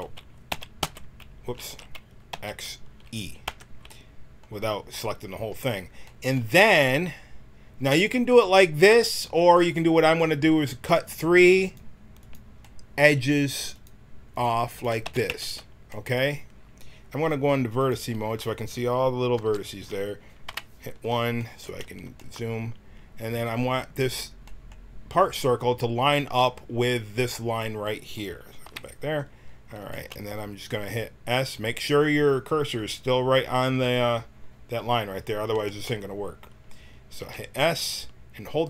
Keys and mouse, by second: 0.5 x, 1.6 ctrl+z, 2.3 x, 10.8-15.3 drag, 15.0 x, 15.9-17.8 drag, 19.3 l, 20.4 KP_1, 28.6 KP_1, 37.1 s.